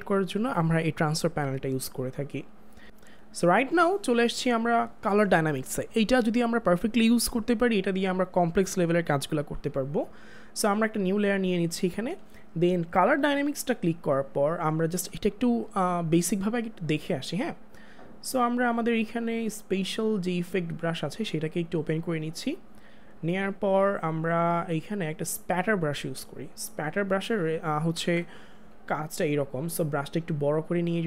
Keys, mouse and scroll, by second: 19.5 click, 25.6 click, 28.0 ctrl+z.